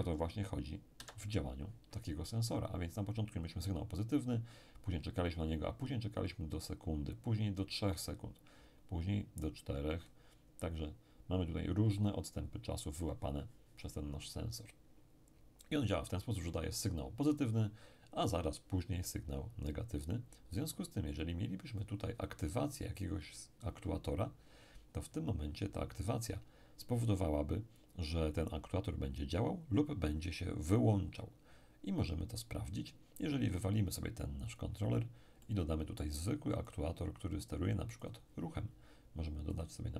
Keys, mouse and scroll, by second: 0.9 Escape, 21.8 click, 34.4-37.7 drag, 35.4-37.7 middle drag, 38.0 click, 39.5 click.